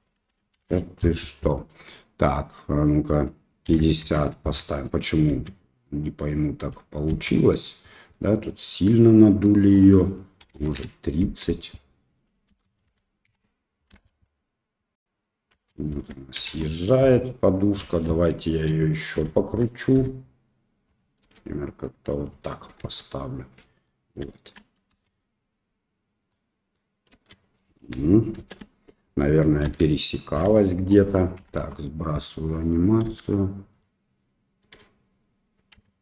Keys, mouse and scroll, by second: 0.6 shift+Left, 2.4-4.5 drag, 4.9 middle click, 5.3 space, 7.1 space, 7.4 middle drag, 8.1-8.5 middle drag, 9.9-11.4 drag, 11.2 space, 12.5 space, 13.3 shift+Left, 13.9 space, 15.5 space, 16.3 shift+Left, 17.2 click, 17.7 KP_1, 18.4 KP_3, 19.3-22.8 shift+drag, 19.9 r, 21.2 g, 22.7 KP_1, 23.5-23.8 middle drag, 24.3 shift+middle click, 24.8 space, 26.4-27.1 middle drag, 27.5 middle drag, 27.5 space, 28.4 shift+KP_1, 29.6 KP_3, 30.6 shift+middle drag, 31.3 shift+Left, 33.0 r, 34.7 h.